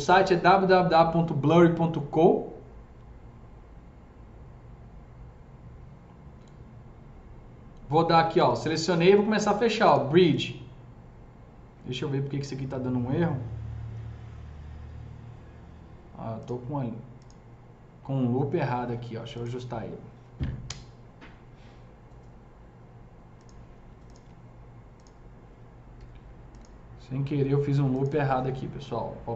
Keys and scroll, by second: 20.5 Delete, 25.8 Delete, 26.5 Delete, 27.9 Delete.